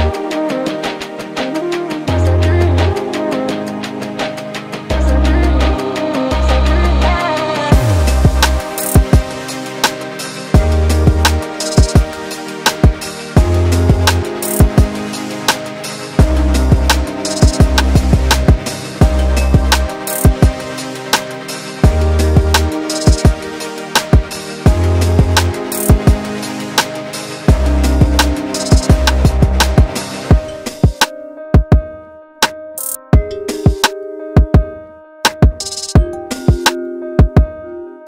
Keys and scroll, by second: 6.2 ctrl+g, 13.9 ctrl+e, 35.5 ctrl+alt+shift+e.